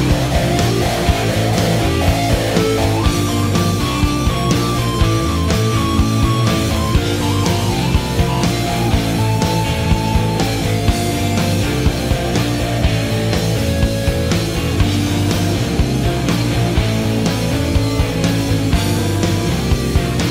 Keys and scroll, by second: 3.5 4, 3.8 Return.